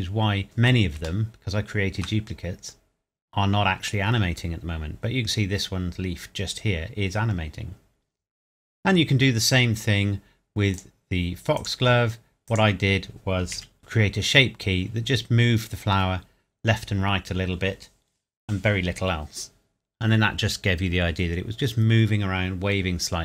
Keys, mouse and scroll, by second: 0.0 middle click, 0.4 scroll down 1, 1.2 shift+middle click, 2.3 scroll up 1, 7.4 scroll up 1, 7.6 scroll down 1, 10.7 click, 10.8 click, 13.5 KP_Decimal, 13.8 middle click, 14.0 scroll up 1.